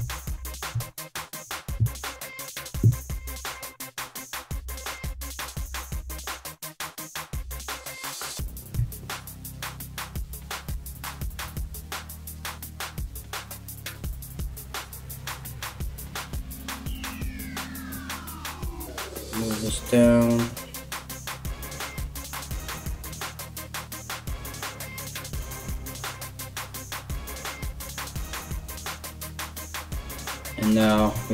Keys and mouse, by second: 0.3 KP_3, 2.0 l, 3.0 g, 4.5 r, 7.7 alt+right click, 7.8 alt+middle click, 8.4 2, 8.8 right click, 9.0 middle click, 9.7 right click, 9.9 middle click, 10.3 right click, 10.5 ctrl+middle click, 10.8 click, 11.0-12.7 middle drag, 11.6 ctrl+z, 12.7 click, 12.9-24.7 middle drag, 13.5 g, 17.8 l, 18.6 g, 21.1 right click, 22.0 r, 23.4 g, 24.7 right click, 24.8-27.2 middle drag, 25.2 g, 27.2 right click, 27.3-31.3 middle drag, 27.4 g, 30.5 right click, 31.1 shift+right click.